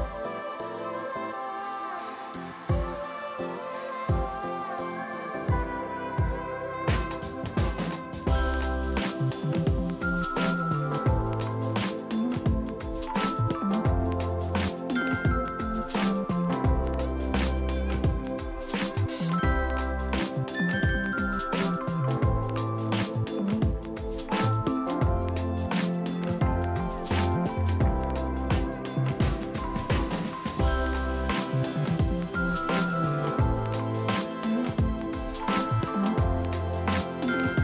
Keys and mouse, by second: 0.1 Delete, 1.7 click, 2.6 a, 2.7 click, 2.9 KP_3, 3.1 Return, 6.6 click, 7.6 x, 7.8 click, 8.4 Left, 8.5 Right, 8.8 Left, 10.0 KP_2, 10.2 Return, 10.6 click, 11.3 ctrl+shift+click, 11.8 click, 13.3 click, 14.0 ctrl+shift+x, 14.2 click, 14.5 Left, 15.6 Escape, 15.8 click, 15.9 Delete, 16.2 click, 16.4 click, 16.7 KP_5, 17.8 click, 21.0 click, 21.8 alt+y, 21.9 click, 23.6 ctrl+shift+x, 23.8 click, 24.1 shift+click, 24.3 ctrl+1, 24.3 click, 24.8 Delete, 25.0 click, 25.3 Delete, 25.5 click, 25.7 click, 25.9 ctrl+x, 26.0 click, 26.7 shift+click, 27.2 x, 27.3 click, 27.6 ctrl+click, 27.8 right click, 28.0 click, 31.2 click, 31.8 click, 32.0 Escape, 32.2 ctrl+1, 32.3 Escape, 32.4 click, 32.8 Escape, 33.2 click, 35.4 ctrl+z, 35.9 click, 36.3 Left, 36.7 click, 37.0 ctrl+e, 37.1 click, 37.3 ctrl+shift+x.